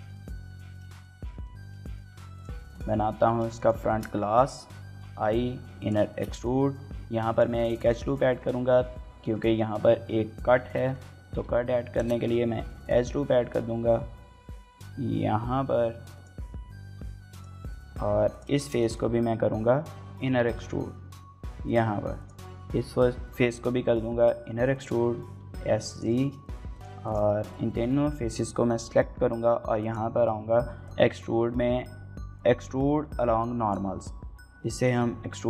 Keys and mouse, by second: 0.0 shift+middle click, 0.2 middle click, 0.7 shift+middle click, 0.9 middle click, 1.2 Tab, 1.6 shift+middle click, 2.0 Tab, 3.6 middle click, 3.8 shift+middle click, 4.8 i, 5.8 click, 6.1 shift+middle click, 6.3 middle click, 6.7 ctrl+r, 8.0 shift+middle click, 8.3 middle click, 9.2 shift+middle click, 9.4 middle click, 10.6 shift+middle click, 10.9 middle click, 11.4 x, 11.8 KP_0, 12.0 KP_Enter, 12.7 g, 12.8 g, 16.1 click, 16.8 g, 17.3 click, 18.1 3, 18.3 click, 18.6 shift+middle click, 18.8 middle click, 20.4 i, 21.7 click, 22.2 click, 23.3 i, 24.7 click, 25.0 s, 25.2 z, 25.9 click, 26.2 shift+middle click, 26.4 middle click, 27.0 shift+click, 27.8 shift+middle click, 29.9-33.7 drag, 34.7-35.4 drag.